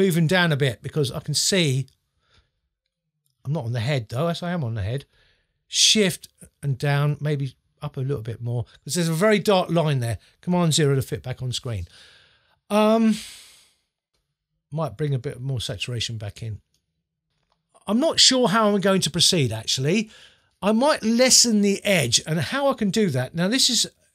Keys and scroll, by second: 0.6 Down, 5.8 shift+Down, 10.8 super+0.